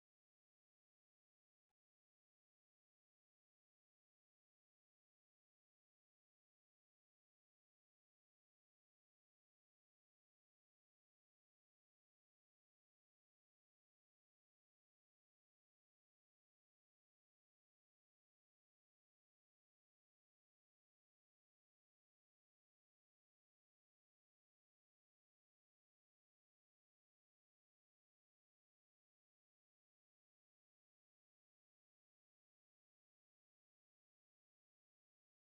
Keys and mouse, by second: 0.1 click, 1.5 i, 2.8 a, 3.5 i, 6.5-8.2 drag, 9.9 click, 10.4 g, 12.2-14.2 middle drag, 14.9 g, 17.0 middle click, 17.5 click, 17.9 middle click, 19.0 r, 19.7 click, 19.8 middle click, 19.9 click, 20.3 g, 21.0 middle click, 21.6 shift+middle click, 22.0 middle click, 23.2 middle click, 24.1 g, 26.4 middle click, 27.5 middle click, 28.2 click, 28.6 r, 30.9 middle click, 31.3 g, 32.9 middle click, 34.7-35.4 drag.